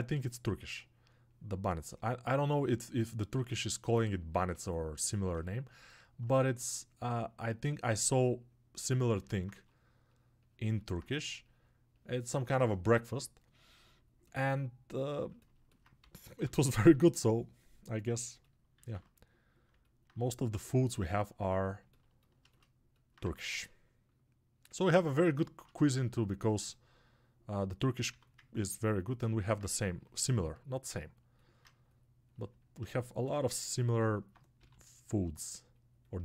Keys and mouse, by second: 4.9-6.1 alt+shift+right drag, 6.1-36.2 alt+drag.